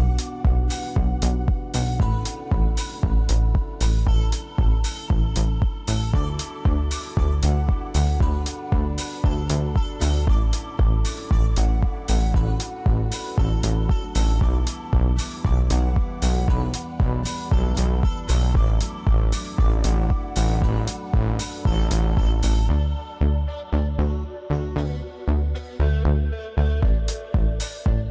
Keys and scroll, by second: 8.5 ctrl+d, 11.4 space.